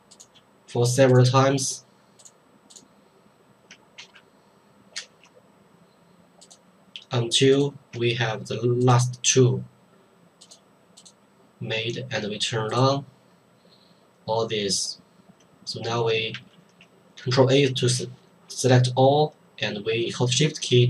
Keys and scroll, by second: 4.0 ctrl+x, 5.0 ctrl+v, 16.3 ctrl+a.